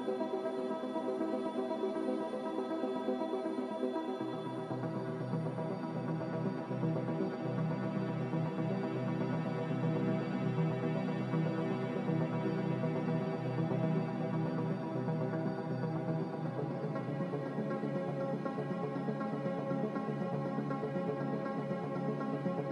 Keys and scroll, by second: 0.0-2.5 typing, 5.3-6.1 typing, 8.4 m.